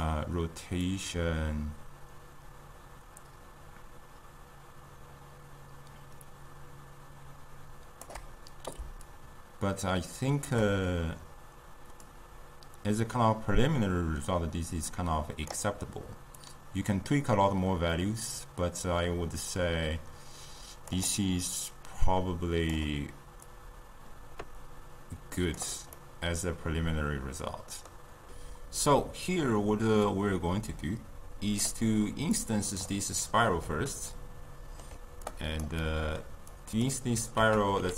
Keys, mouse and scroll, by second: 1.4-19.5 drag, 21.8-26.1 drag, 26.1-28.3 middle drag, 30.1-33.3 drag, 33.3-35.3 middle drag, 35.3 click, 35.8-36.5 middle drag, 36.5 click, 37.4 ctrl+a.